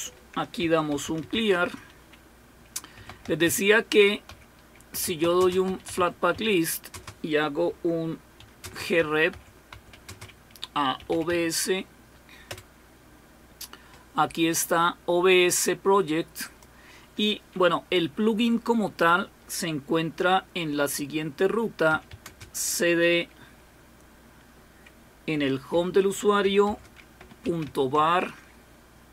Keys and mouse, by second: 1.3 typing, 1.6 Return, 2.7-7.4 typing, 8.6-11.3 typing, 12.5 typing, 16.4 click, 27.7-28.2 typing, 28.0 Tab.